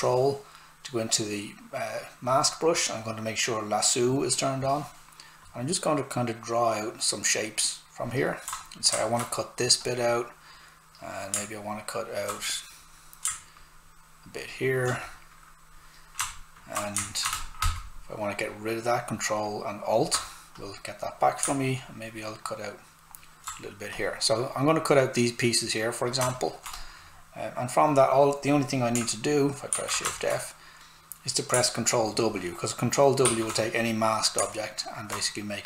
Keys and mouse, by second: 2.3 ctrl+click, 5.7-8.2 ctrl+drag, 9.3 right click, 10.1 click, 26.2 alt+right click, 26.7 click, 29.7 shift+f, 30.1 alt+right click, 33.2 ctrl+w, 34.5 alt+right click.